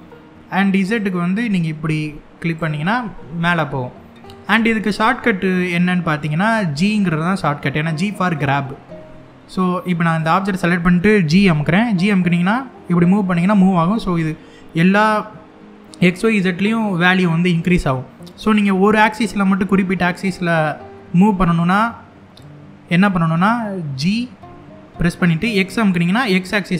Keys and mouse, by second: 0.6-2.2 drag, 9.7 click, 11.0 g, 18.1-24.1 right drag, 24.1 g, 25.3 x.